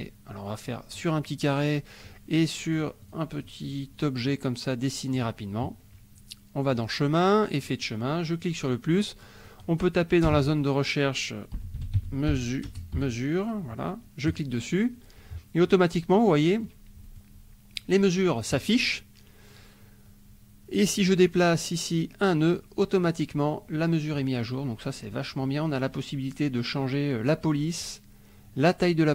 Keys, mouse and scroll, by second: 2.0 click, 2.7 click, 3.3 click, 3.6 click, 5.1 click, 6.7 click, 7.6 click, 8.4 click, 9.4 click, 10.2 BackSpace, 11.3-12.9 typing, 14.3 click, 16.1 click, 17.2 click, 21.0 click, 22.3 click, 27.3 click.